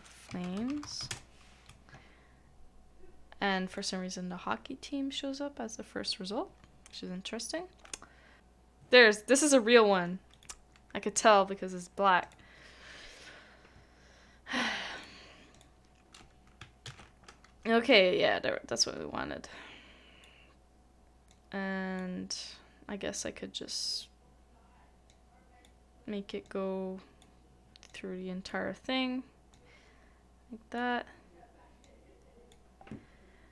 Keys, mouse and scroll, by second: 0.3 right click, 0.3-1.0 typing, 1.1 Return, 10.3 Delete, 12.3 right click, 16.9 ctrl+v.